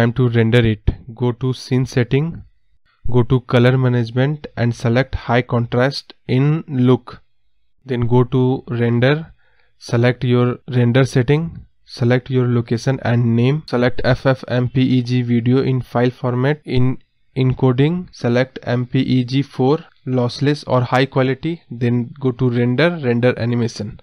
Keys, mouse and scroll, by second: 4.8-7.2 drag, 7.2 space, 10.8 space, 12.8-16.4 drag, 18.3 click, 19.2 click, 19.3-21.6 scroll down 1, 21.6-24.0 drag.